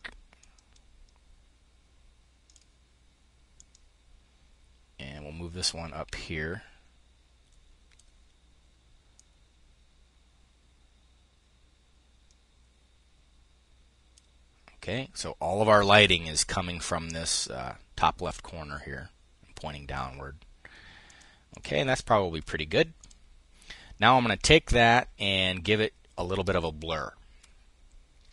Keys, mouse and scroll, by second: 0.0-3.0 drag, 3.2-8.5 drag, 8.7-13.9 drag, 20.6 click, 22.6 click, 28.0 click.